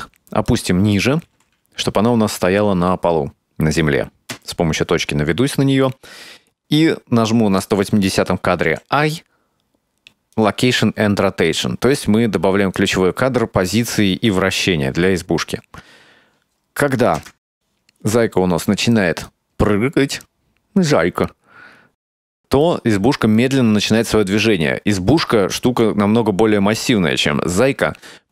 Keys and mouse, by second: 0.1-0.6 middle drag, 1.3 g, 3.1-3.6 middle drag, 4.4 KP_Decimal, 17.2 KP_0, 19.3-26.0 drag.